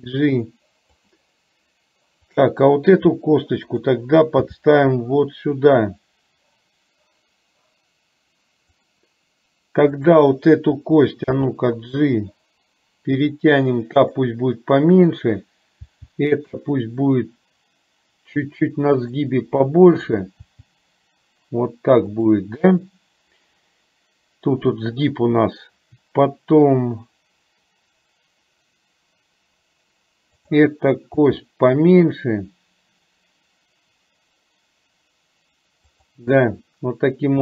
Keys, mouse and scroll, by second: 0.0 g, 2.3 click, 4.6 g, 10.2 click, 11.3 g, 15.0 click, 16.0 g, 20.2 click, 20.6 g, 31.3 g.